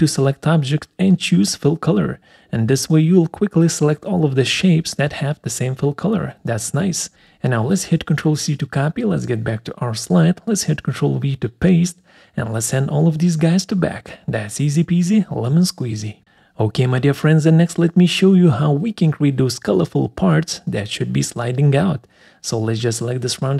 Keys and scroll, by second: 7.1 ctrl+c, 10.0 ctrl+v.